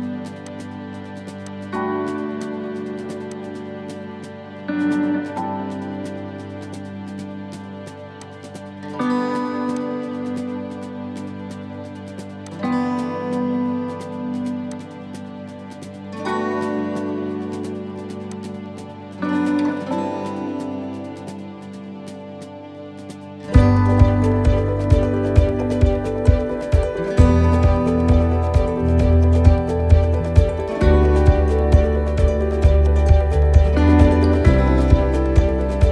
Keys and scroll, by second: 5.1 ctrl+-, 12.5 ctrl+-, 21.1 ctrl+=, 25.8 x.